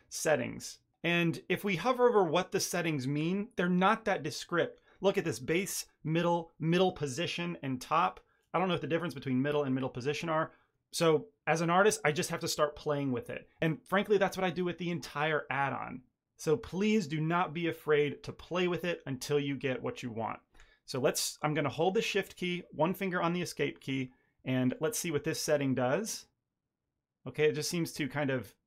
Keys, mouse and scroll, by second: 24.6 click.